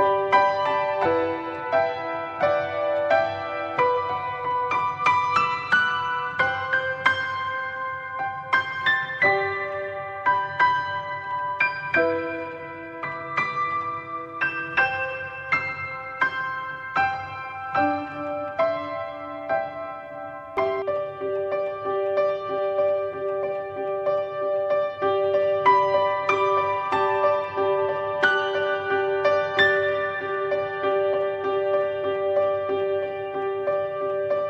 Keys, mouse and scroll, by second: 1.3 click, 2.6 click, 3.4 click, 4.3 click, 5.0 click, 6.0 click, 9.1 click, 23.8 click, 25.8 click, 34.2 click.